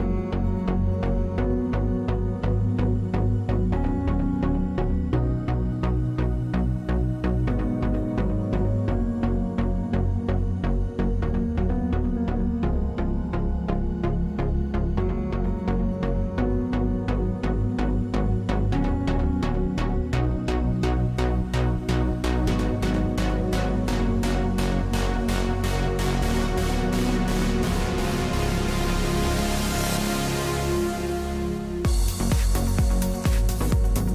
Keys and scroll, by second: 7.8 space, 23.9 w, 28.0 typing, 28.4 Return, 31.6 3.